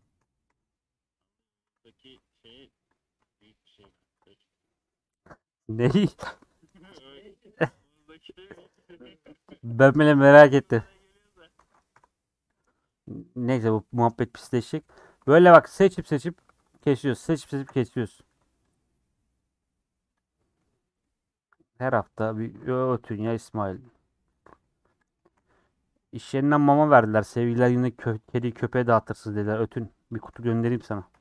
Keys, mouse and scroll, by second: 0.2 Tab, 0.4 3, 0.7-2.5 middle drag, 3.8 ;, 4.4-6.1 middle drag, 6.1 3, 7.6 ;, 8.0 middle click, 8.5 2, 8.8 click, 9.5 scroll up 1, 9.5 middle click, 10.2 scroll down 2, 10.4-11.6 middle drag, 11.6 alt+z, 11.9 3, 13.4 click, 14.4 ;, 14.9 middle click, 15.2 alt+z, 15.4-17.7 middle drag, 17.7 alt+z, 17.9 middle click, 18.2 3, 19.3 click, 19.6 middle click, 20.1 click, 20.4-21.5 middle drag, 21.5-23.1 drag, 23.1 ;, 23.7 alt+z, 23.9 middle click, 24.5 3, 25.0 click, 25.6 c, 26.8 ;, 27.2-28.4 middle drag, 28.4 3, 28.5 click, 29.4 c, 30.8 ;, 31.1-31.2 middle drag.